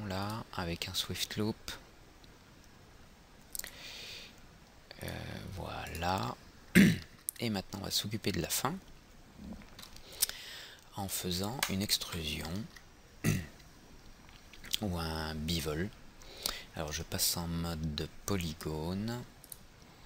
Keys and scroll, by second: 12.1 F3.